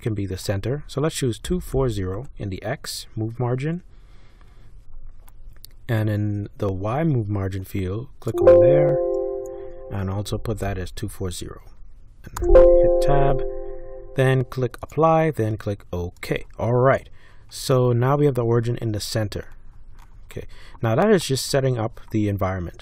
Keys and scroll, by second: 1.2-2.6 typing, 10.0-11.5 typing, 12.4 Tab.